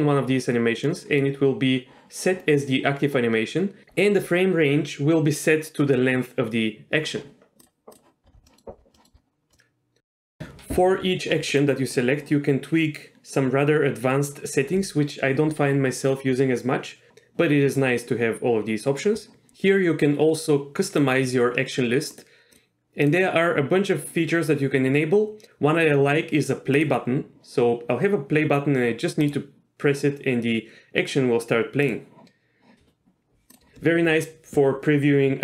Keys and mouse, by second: 0.8 middle click, 8.5 middle click, 11.6-21.6 drag, 22.6 click, 23.1-26.9 drag, 31.9 click, 33.6-35.4 drag.